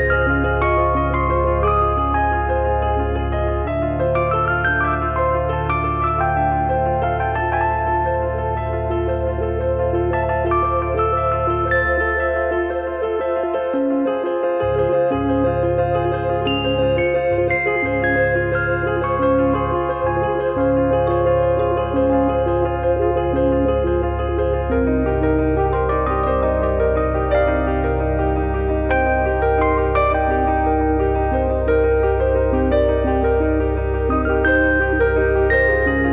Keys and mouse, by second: 1.3 click, 3.1 click, 4.3 shift+middle click, 6.6 click, 7.6 click, 8.6 click, 9.3 click, 14.9 z, 15.5 click, 18.1 click, 20.1 click, 23.7 click, 24.9 click, 29.0 click, 30.1 click, 33.6 middle click.